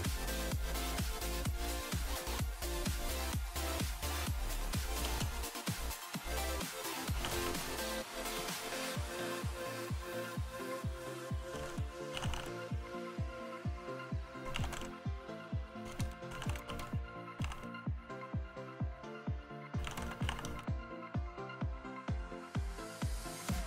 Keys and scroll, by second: 3.1 space, 4.8-21.9 typing, 23.1-23.6 typing.